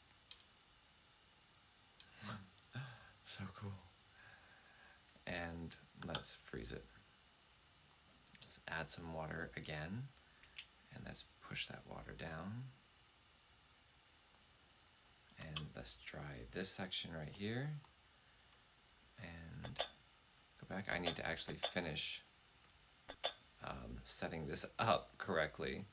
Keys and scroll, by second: 5.9 typing, 9.6-10.3 typing, 15.3 typing, 19.5 F8, 20.8 F8, 21.3 F8, 22.9 F8.